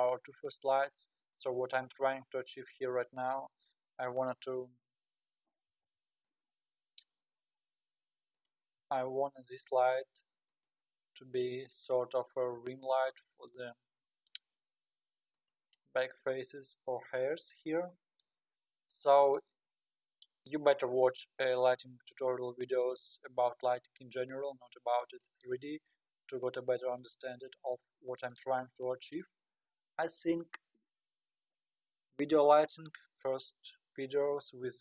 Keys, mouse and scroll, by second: 4.4 KP_1, 5.7 s, 5.9 s, 8.8 g, 11.8 KP_7, 12.6 g, 14.1 r, 16.1-16.6 scroll down 9, 17.3-17.6 scroll down 8, 18.5-19.6 scroll up 15, 21.3-21.8 scroll up 4, 22.2-22.5 scroll up 1, 22.5-23.8 scroll down 3, 23.8 g, 25.6 r, 27.3 g.